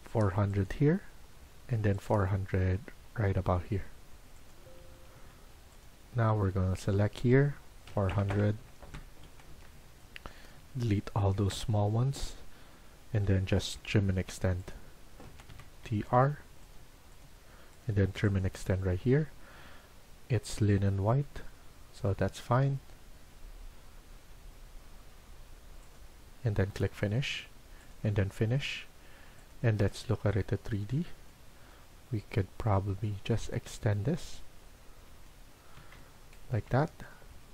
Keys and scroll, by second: 4.5 Escape, 4.9 Escape, 5.1 Escape, 7.6-8.5 typing, 8.7 Return, 9.2 Escape, 9.4 Escape, 11.4 Delete, 13.3-14.0 typing, 15.2 Escape, 15.4 Escape, 15.7-16.4 typing, 18.5-19.2 typing, 35.7 Escape.